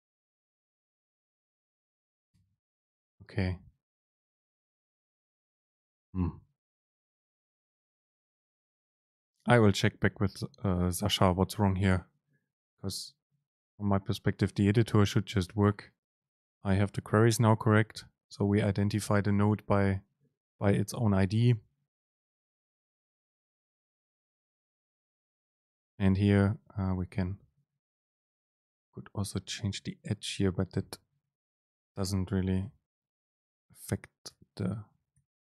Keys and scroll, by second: 2.4 BackSpace, 31.6 BackSpace, 32.7 super+z, 34.0 BackSpace.